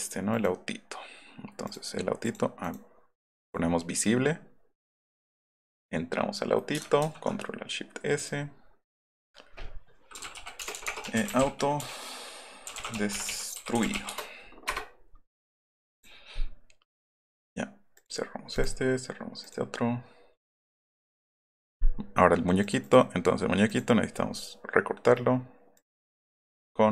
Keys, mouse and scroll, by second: 0.0 click, 0.3 click, 1.6 click, 2.2 right click, 2.6-3.3 right drag, 3.8-4.6 scroll up 4, 5.0 click, 5.2 click, 5.5 scroll up 2, 8.2 click, 9.8-14.4 typing, 15.9 click, 17.2 click, 17.9 click, 18.5 click, 19.4 click, 20.8 click, 21.1 click, 22.6 click, 22.8 click, 23.7 click, 25.7 click, 26.0 click.